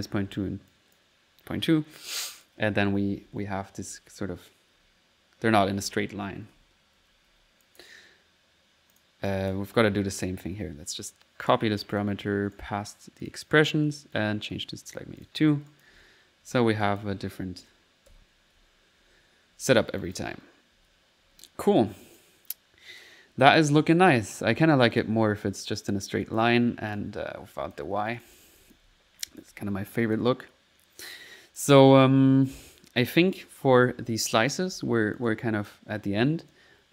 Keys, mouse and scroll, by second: 0.2 1, 0.7 click, 2.2 click, 2.3-7.3 typing, 7.6 click, 8.3 middle click, 8.9 click, 10.2 click, 10.9 right click, 11.4 click, 11.9 click, 12.5 right click, 13.2 click, 13.6 click, 13.9 typing, 14.1 click, 15.3 click, 15.6-21.2 typing, 15.7 click, 16.8 click, 20.0 click, 22.0 click, 22.6 middle click, 23.4 click, 24.3 middle click, 24.9 click, 26.2 click, 26.9 click, 27.5 click, 28.6 click, 28.8-29.5 typing, 29.3 middle click, 29.9 click, 30.5 middle click, 31.1 click, 33.4 middle click, 35.1 click.